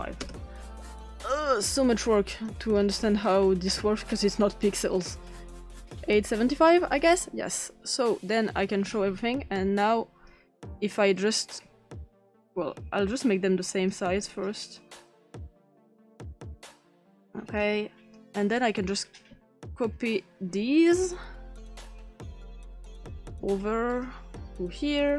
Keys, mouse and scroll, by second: 0.2 Return, 2.3 click, 3.2-4.2 scroll up 5, 5.8-7.4 scroll up 2, 8.5 click, 9.5-10.3 drag, 11.2 click, 13.2-13.9 drag, 14.8 click, 15.8-16.8 drag, 17.6 click, 18.5 click, 19.3 ctrl+c, 19.3-19.7 ctrl+drag, 20.9 click, 21.7 ctrl+p, 22.7 click, 23.4 ctrl+c, 23.9 click, 24.7 ctrl+p.